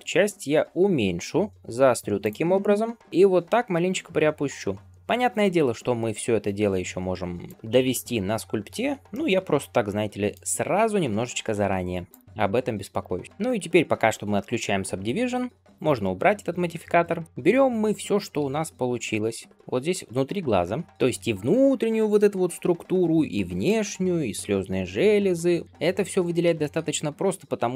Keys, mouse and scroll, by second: 2.3-2.9 scroll down 1, 2.9 scroll down 1, 3.0 shift+middle click, 3.3 g, 7.5-8.5 scroll up 2, 8.5-9.0 scroll down 1, 9.0-10.5 middle drag, 10.5-11.3 scroll up 1, 12.0 click, 12.3-12.7 scroll up 1, 12.7 middle click, 13.1 scroll down 1, 13.2 ctrl+space, 13.2 scroll up 3, 13.4 shift+middle drag, 13.9-15.5 scroll up 1, 15.6 click, 16.9 ctrl+space, 17.2 scroll down 1, 17.2 alt+shift+z, 17.2-18.1 scroll up 1, 18.2 alt+z, 19.0-20.3 middle drag, 20.3 click, 21.0-23.6 middle drag, 23.7-24.6 scroll up 3, 24.6-25.7 middle drag, 25.7 scroll down 1, 26.0 alt+z, 26.5 shift+middle click, 26.8 scroll up 1.